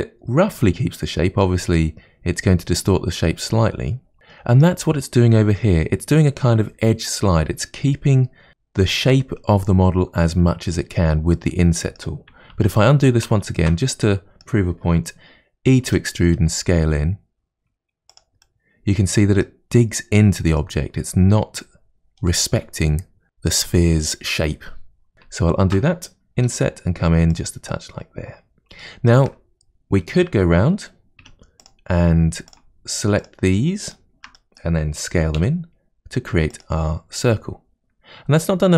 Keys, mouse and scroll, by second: 4.2 middle click, 11.4-12.5 middle drag, 12.5 ctrl+z, 12.9 ctrl+z, 13.3 ctrl+z, 13.9-15.9 middle drag, 15.9 e, 18.4-23.2 middle drag, 25.3 ctrl+z, 26.4 i, 27.7 middle click, 28.6 scroll up 2, 28.8-31.2 shift+middle drag, 31.2 1, 31.6 click, 32.5 shift+click, 33.2 shift+click, 33.9 shift+click, 34.4-35.4 middle drag, 35.4 s, 37.2-38.7 middle drag.